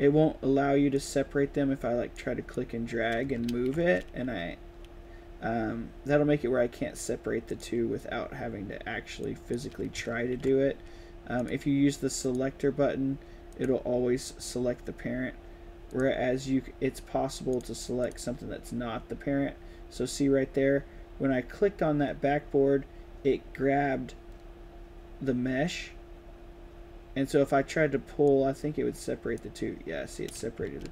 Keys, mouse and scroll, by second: 0.8 click, 2.0-2.4 drag, 3.4 ctrl+z, 7.4 click, 9.1-9.4 drag, 10.0 ctrl+z, 11.2 click, 12.1 click, 13.4 click, 15.8 click, 17.4 click, 17.9 click, 28.1-29.4 drag, 30.7 ctrl+z.